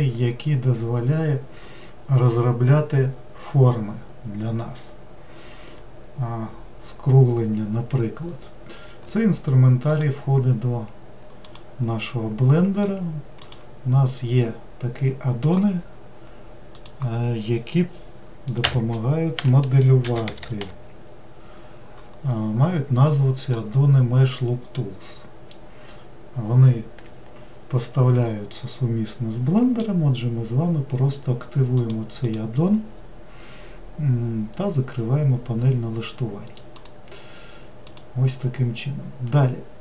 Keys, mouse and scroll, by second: 9.9-13.1 drag.